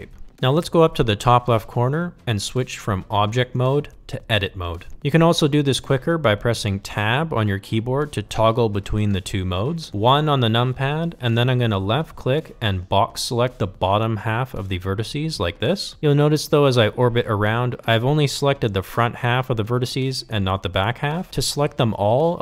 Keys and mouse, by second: 2.3-4.5 drag, 5.8 Tab, 9.2 KP_1, 14.0-15.7 drag, 17.8-21.2 middle drag, 22.2 KP_1.